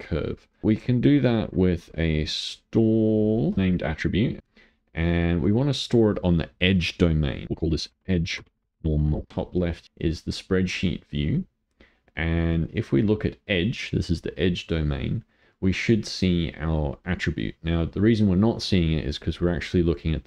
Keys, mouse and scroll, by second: 0.6 click, 4.4 click, 5.3-8.0 drag, 9.3 click, 9.8 click, 12.6 click, 15.0-19.5 middle drag, 19.5 click.